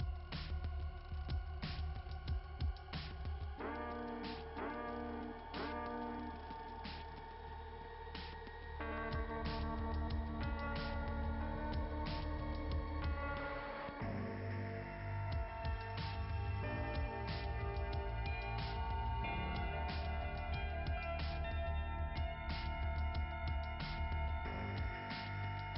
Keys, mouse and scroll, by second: 9.1-9.4 scroll down 2.